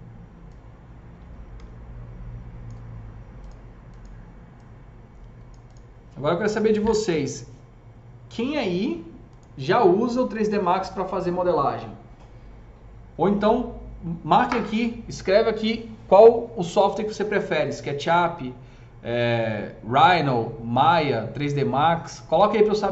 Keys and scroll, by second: 1.6 shift+s.